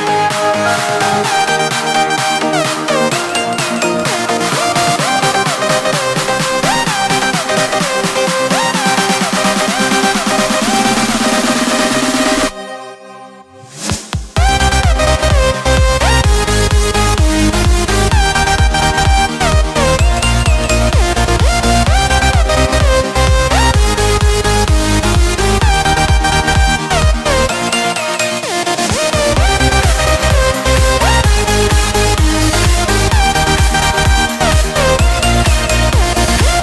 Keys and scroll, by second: 1.4 ctrl+alt+z, 1.7 ctrl+space, 7.9 ctrl+shift+[, 21.8 ctrl+space.